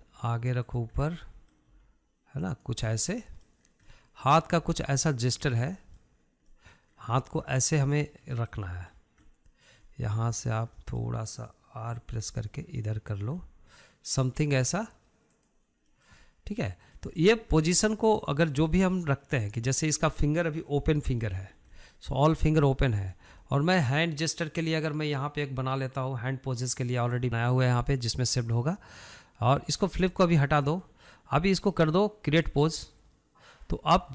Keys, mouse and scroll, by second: 0.2-1.2 middle drag, 1.2 r, 2.3 middle click, 3.1 r, 4.3 scroll down 2, 4.5-5.0 middle drag, 5.0 scroll up 1, 5.3 middle click, 6.0 r, 6.8 scroll down 1, 6.9-7.6 middle drag, 7.6 scroll down 1, 7.9-8.3 middle drag, 8.3 scroll up 1, 8.5-9.1 middle drag, 9.2-9.6 middle drag, 9.6 scroll down 1, 9.7-11.1 middle drag, 11.3-12.1 middle drag, 12.2-13.5 middle drag, 13.5 r, 14.8-16.0 middle drag, 16.0 r, 17.3-18.5 middle drag, 18.9 scroll up 1, 19.1-20.0 middle drag, 20.1-20.5 middle drag, 20.8-22.9 middle drag, 22.9 scroll up 1, 23.1-24.0 shift+middle drag, 24.0 click, 24.8-28.2 shift+middle drag, 31.1-31.7 drag, 31.7-33.9 middle drag, 33.9 click.